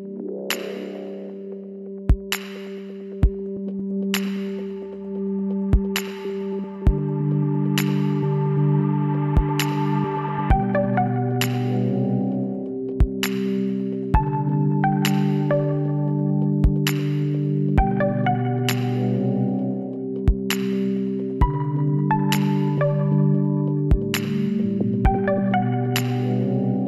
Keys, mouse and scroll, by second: 11.2-13.0 middle drag, 15.4 ctrl+r, 20.1-25.6 middle drag.